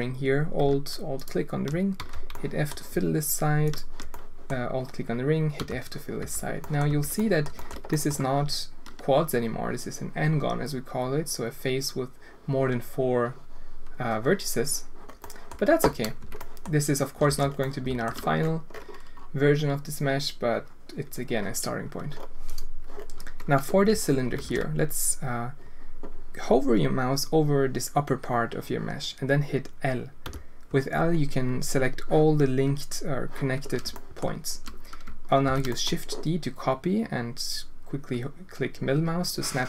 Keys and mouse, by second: 2.0 f, 2.3 click, 4.2 click, 5.6 f, 6.2 Tab, 6.6 drag, 6.9 Tab, 7.2 drag, 7.6 shift+click, 7.9 click, 15.2 click, 16.2 Tab, 16.4 drag, 17.3 alt+a, 17.6 alt+click, 23.9 Tab, 24.4 alt+a, 30.2 l, 34.0 shift+click, 35.4 shift+d.